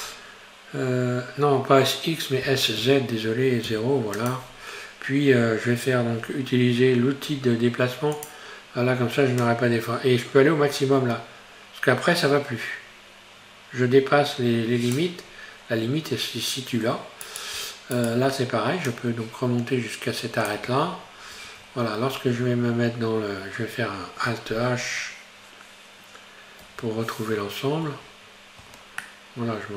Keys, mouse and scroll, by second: 2.5 s, 8.2-12.5 drag, 15.4-16.7 scroll up 1, 16.7-17.3 scroll up 1, 17.3 right click, 18.0 shift+right click, 18.9-20.7 drag, 20.7 Tab, 21.4 Tab, 21.6-22.0 scroll down 3, 22.6 Tab, 26.7 alt+h, 27.9 Tab, 28.5 scroll down 1, 28.8 Tab, 29.1-29.7 middle drag.